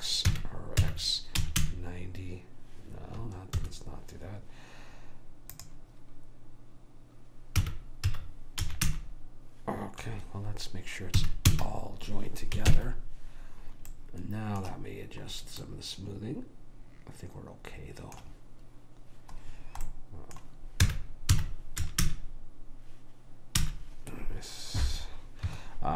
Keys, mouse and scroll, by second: 0.4 r, 1.0 x, 5.7 click, 7.7 r, 11.3 a, 11.6 a, 12.9 ctrl+j, 20.0 middle click, 21.0 r.